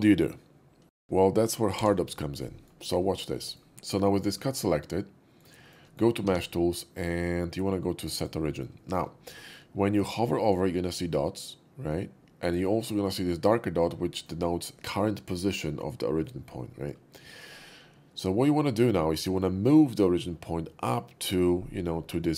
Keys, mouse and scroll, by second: 2.3-2.6 middle drag, 3.1 shift+middle drag, 3.4 shift+middle click, 3.7 q, 4.2 shift+middle click, 4.5-5.4 shift+middle drag, 5.6 shift+middle click, 5.9 shift+middle click, 6.2 q, 8.2 click, 8.8 shift+middle click, 9.4 shift+middle click, 10.0-10.3 shift+middle drag, 16.6-16.9 middle drag, 17.3 shift+middle click, 18.2-19.3 shift+middle drag.